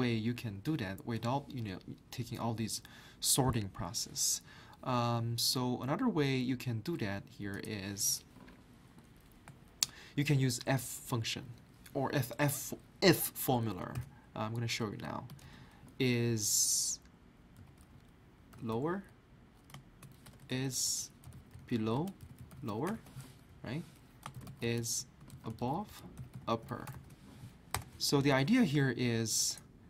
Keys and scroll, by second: 13.9 i, 15.3 s, 17.3-19.2 typing, 20.3-27.7 typing, 27.7 Return.